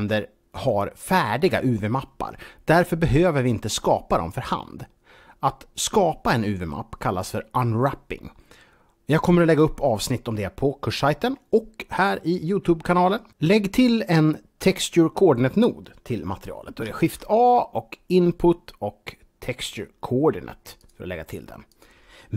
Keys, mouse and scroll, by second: 16.9 shift+a, 20.7 click, 21.6 click.